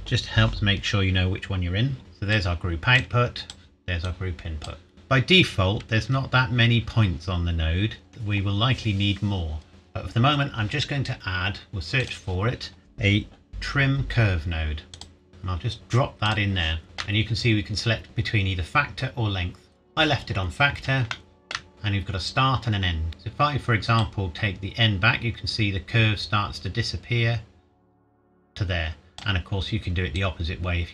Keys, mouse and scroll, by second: 2.0-2.3 scroll up 1, 2.3 click, 4.9 Tab, 6.1 a, 8.1 Tab, 11.7 click, 15.0 click, 16.3 click, 16.8 shift+middle click, 20.3-21.1 scroll up 1, 21.1 shift+middle click, 21.7-22.2 scroll up 1, 24.3 click.